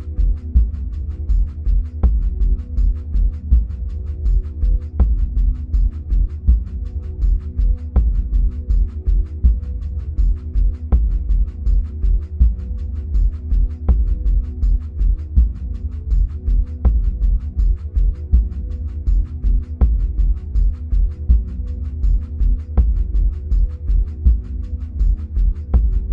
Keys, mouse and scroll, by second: 1.5-4.0 middle drag, 4.0 click, 6.8-9.5 middle drag, 7.5-9.5 scroll up 2, 9.5-14.2 drag, 15.9-18.6 middle drag, 16.6-18.6 scroll down 2, 18.6-26.1 drag.